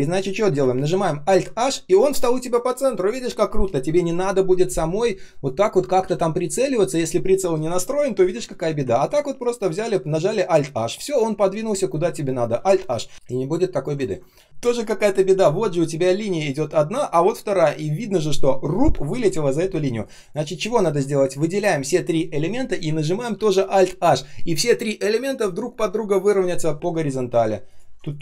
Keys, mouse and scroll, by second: 1.2 alt+h, 6.0 ctrl+z, 8.3 ctrl+z, 8.9 ctrl+click, 10.2 alt+h, 12.5 alt+h, 13.1 ctrl+scroll down 1, 13.1 space, 13.2 space, 14.0 ctrl+scroll down 1, 14.2 space, 14.4-18.1 ctrl+scroll up 1, 21.1 shift+click, 21.5 shift+click, 23.7 alt+h, 26.7 ctrl+scroll down 1, 27.6 ctrl+click, 28.0 ctrl+shift+click.